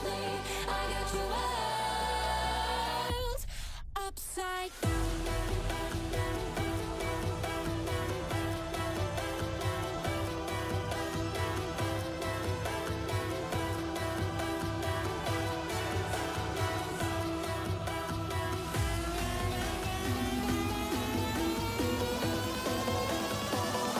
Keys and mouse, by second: 2.0 middle click, 3.0-3.8 drag, 9.6 middle click, 10.2 shift+drag, 11.4 click, 12.3 middle drag, 12.8 ctrl+s, 13.4 click, 13.6 shift+drag, 14.4-15.7 drag, 16.9-17.7 shift+drag, 17.0-17.7 right drag, 18.8 click, 18.8 middle click, 18.8 right click, 19.6-21.5 drag, 22.5 middle click, 23.1 shift+drag.